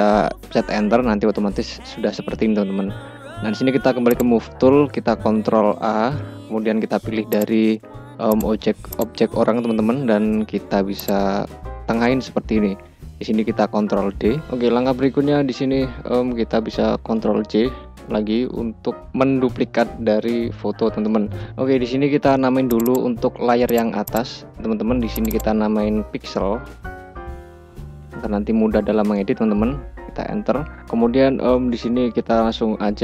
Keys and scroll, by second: 5.1 ctrl+a, 13.6 ctrl+d, 16.6 ctrl+j, 28.7 Return.